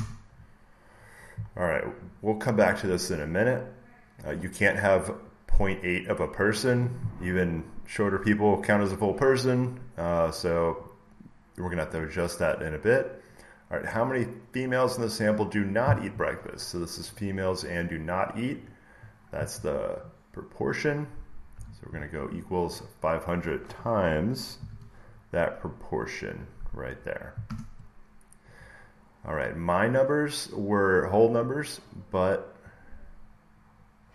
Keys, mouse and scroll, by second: 1.5 scroll, 2.5 click, 4.3 click, 11.9-14.0 drag, 17.1 click, 18.6 click, 21.1 click, 21.5 =, 22.8 click, 24.5 *, 25.7 click, 27.3 Return, 31.4-32.0 scroll down 3, 33.2 scroll down 1.